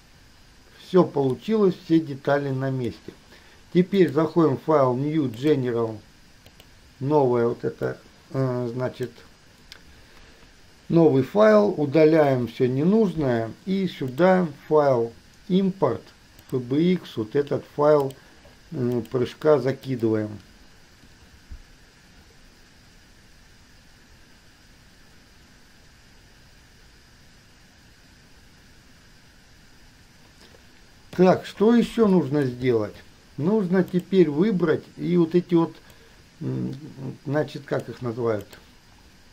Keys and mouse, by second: 1.5-3.4 drag, 4.0-7.0 drag, 8.2 click, 10.4 KP_1, 12.4 Delete, 31.3 KP_3, 34.2-35.2 drag, 36.3-38.0 drag.